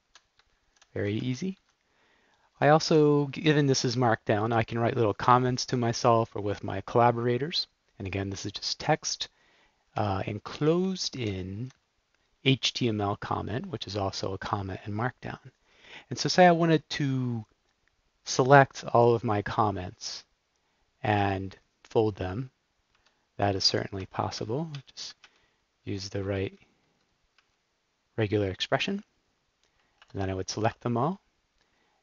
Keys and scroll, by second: 0.4 shift+Tab, 0.9 Up, 1.5 shift+Tab, 2.4 Up, 10.0 Up, 10.3 shift+Right, 10.6 shift+Right, 10.8 shift+Right, 11.1 shift+Right, 23.0 Left, 23.7 super+f, 24.4 Up, 24.6 Up, 24.9 Up, 25.1 Up, 25.7 Down, 26.5 Up, 27.3 Down, 30.1 alt+Return.